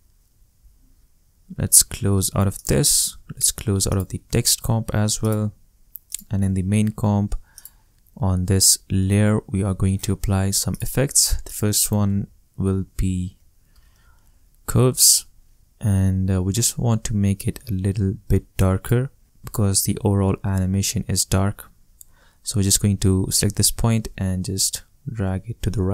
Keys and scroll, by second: 12.1-13.9 typing, 14.9 v.